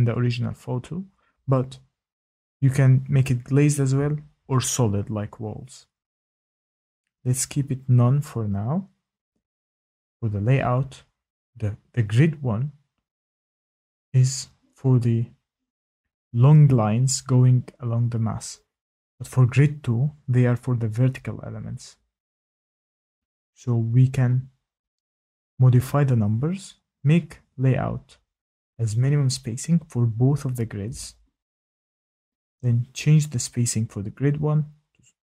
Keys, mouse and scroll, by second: 10.3 click, 31.9 click, 33.5 click.